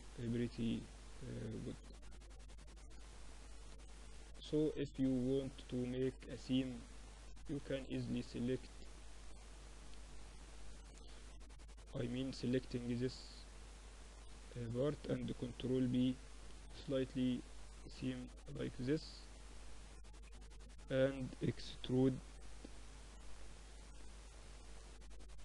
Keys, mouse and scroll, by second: 5.9-6.9 middle drag, 6.2 Tab, 7.1 Tab, 7.5 Tab, 8.1 Tab, 8.1-10.1 drag, 8.5 Tab, 10.1 z, 10.5 Tab, 11.3 Tab, 11.9 a, 12.5 z, 12.8 a, 13.3 a, 14.5 ctrl+b, 19.2-21.8 middle drag, 21.8 e.